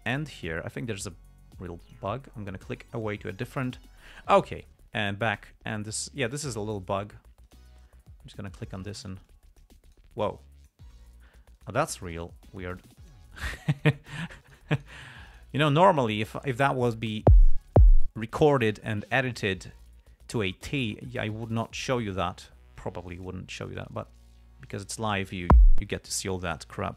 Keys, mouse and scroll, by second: 2.2 click, 3.7 click, 6.3 click, 7.8 right click, 8.8 right click, 9.3 right click, 9.6 click, 10.2 right click, 10.6 click, 11.9 right click, 12.5 right click, 13.2 click, 14.1 right click, 14.8 right click, 15.1 right click, 15.6 right click, 16.5-17.2 drag, 21.7 click, 23.1-23.8 drag, 24.2-25.8 drag.